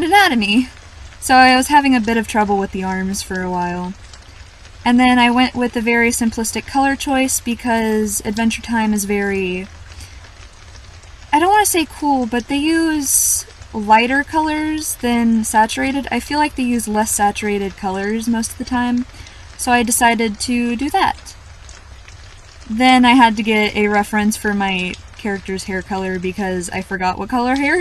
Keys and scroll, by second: 0.1-0.4 scroll down 1, 8.2 scroll up 1, 8.5 scroll down 1, 11.2-11.6 scroll up 1, 13.1-13.5 scroll down 1, 14.9-15.3 scroll down 1, 16.0-16.4 scroll up 1, 16.4-16.8 scroll down 1, 17.5 scroll up 1, 17.8 scroll down 1, 23.5 scroll up 1.